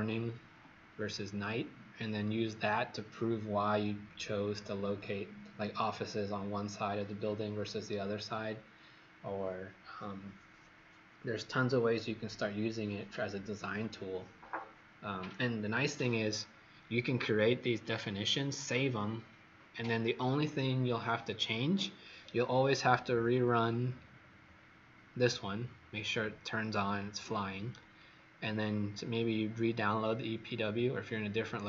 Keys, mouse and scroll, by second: 22.1-23.7 scroll down 9, 23.7-25.0 scroll up 10, 27.9-28.5 scroll down 3.